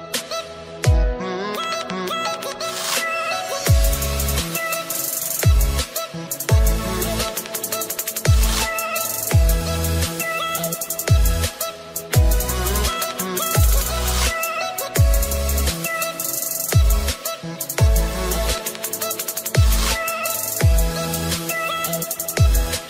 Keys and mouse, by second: 8.5 click, 9.3 click, 11.3 click, 11.6 Delete, 12.9 Delete, 12.9 click, 12.9 click, 14.2 click, 15.3 Delete, 18.9 click, 20.0 click, 20.0-21.3 typing, 20.7 click, 22.3 click.